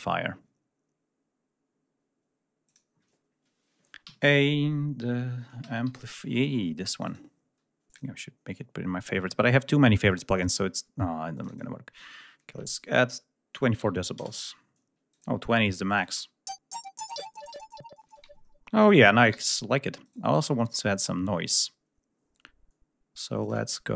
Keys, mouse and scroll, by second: 2.5 click, 3.9 a, 4.8 ß, 5.4 a, 5.7 m, 6.7 click, 7.8 click, 13.6 2, 13.7 4, 14.1 Return, 15.0 click, 15.8 click, 16.0 space, 17.9 space, 19.2 ctrl+g.